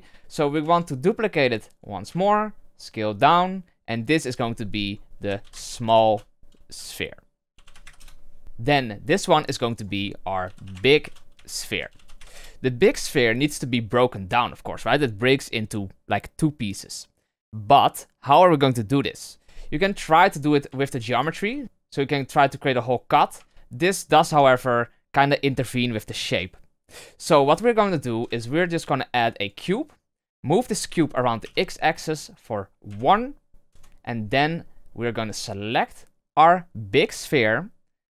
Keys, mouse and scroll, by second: 0.9 shift+d, 2.0 s, 4.0 click, 4.1-5.7 drag, 5.7 l, 9.5-12.1 drag, 12.1 e, 19.6-20.2 scroll up 5, 20.2 Tab, 21.3 ctrl+r, 24.3 Tab, 24.5-27.5 scroll down 4, 27.9-28.2 scroll down 1, 28.2 shift+a, 30.8 g, 34.4-34.8 middle drag, 34.8 scroll up 1, 36.2 right click.